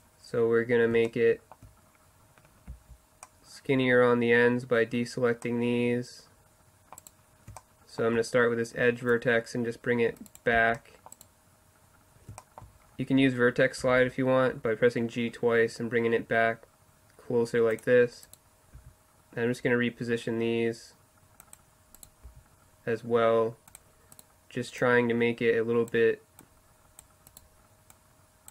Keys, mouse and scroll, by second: 1.2 middle click, 2.7 c, 7.7-9.1 middle drag, 9.1-11.2 drag, 10.6 c, 11.2-12.4 right drag, 12.4 middle click, 12.6-13.7 right drag, 13.9 g, 18.3 right click, 18.8 g, 22.3 g, 24.8-25.9 middle drag, 27.3-28.5 middle drag.